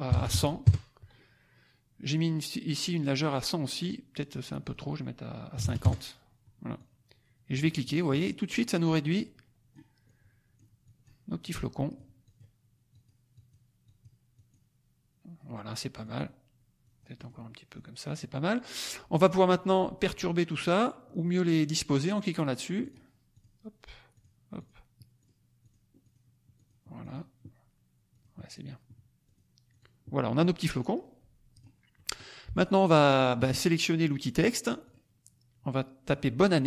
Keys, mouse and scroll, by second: 0.0 KP_1, 0.2 KP_0, 0.6 KP_Enter, 4.4 click, 5.5 KP_5, 5.6 KP_0, 5.8 KP_Enter, 6.7 click, 7.8-9.9 drag, 10.0 click, 10.8 click, 11.4 click, 12.2 click, 12.8 click, 13.3 click, 13.8 click, 14.3 click, 15.9 click, 16.8 click, 22.7 click, 23.4 click, 24.1 click, 24.5 click, 25.1 click, 25.6 click, 26.0 click, 26.5 click, 27.0 click, 28.0 click, 28.5 click, 29.2 click, 29.7 click, 30.1 middle click, 30.1-30.5 scroll down 1, 30.7 middle click, 31.5 click, 31.9 click, 32.3 middle click, 34.8 click, 36.3 middle click, 36.4 click.